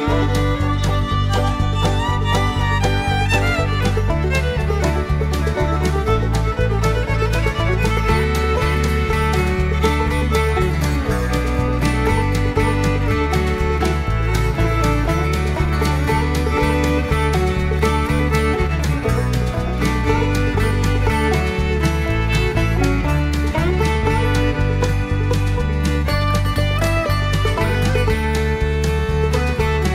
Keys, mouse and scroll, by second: 0.1 ctrl+v, 1.1 click, 1.6 click, 3.0 click, 4.2 scroll down 2, 4.6-6.5 middle drag, 8.2 click, 11.2 click, 12.2 click, 13.2 click, 14.4 click, 15.8-17.9 typing, 19.0 click, 19.4 click, 22.5 click, 23.6 click, 24.9 click, 26.7 click.